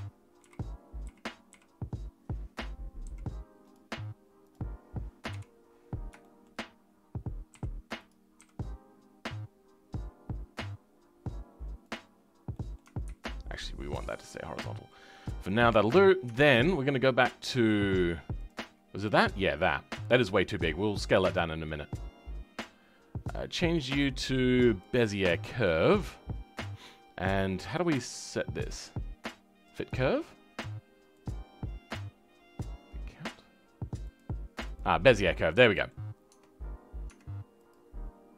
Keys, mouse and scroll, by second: 0.3 KP_4, 0.9 KP_4, 2.9 r, 4.6 scroll down 2, 5.2 KP_1, 5.7-6.1 scroll up 1, 6.1-7.4 shift+middle drag, 7.4 s, 12.0-12.4 scroll down 3, 12.4 middle click, 12.9 ctrl+z, 13.7-15.1 middle drag, 15.1-15.4 scroll down 4, 15.4 middle click, 16.2 Tab, 18.6-18.9 scroll down 3, 18.9 middle click, 19.5-24.7 scroll up 4, 24.7 click, 25.2 scroll down 2, 25.5 middle click, 26.0-29.8 scroll up 3, 29.8-35.1 drag, 35.1 scroll down 2, 35.5 middle click, 36.2 Tab, 36.5-37.0 scroll up 5, 37.0 Tab.